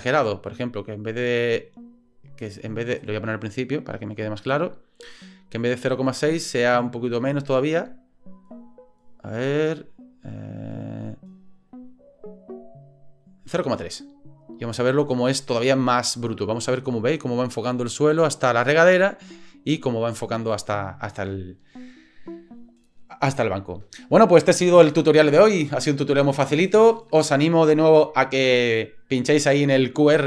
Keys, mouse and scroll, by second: 1.2-3.0 drag, 4.0 click, 5.5-6.8 drag, 6.8 middle click, 7.2-8.8 drag, 8.9 click, 9.4 click, 9.5 click, 9.6 click, 10.6 click, 10.9 click, 12.2 click, 14.7 click.